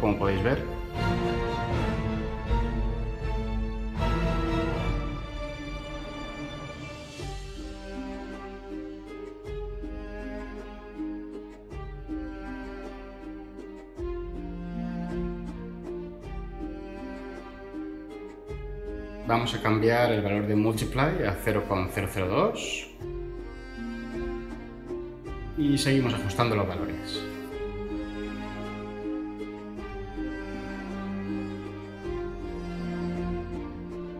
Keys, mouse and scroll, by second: 20.6-21.7 typing, 22.1 Return.